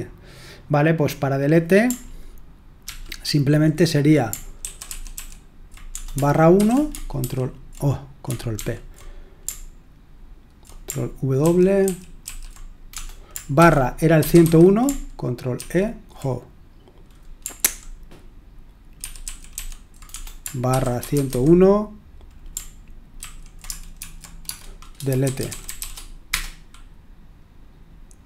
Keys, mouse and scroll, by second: 1.3-2.8 drag, 2.8 ctrl+p, 4.6 ctrl+w, 4.8 ctrl+w, 5.1 ctrl+w, 5.9 BackSpace, 6.5 /, 7.2 ctrl+w, 8.5 ctrl+p, 11.4 ctrl+w, 13.5 c, 15.5 ctrl+w, 15.5 BackSpace, 15.5 /, 17.6 ctrl+p, 19.0 ctrl+w, 19.2 ctrl+w, 19.5 ctrl+w, 20.1-21.7 typing, 23.2 ctrl+a, 24.0 alt+f, 24.4-26.2 typing.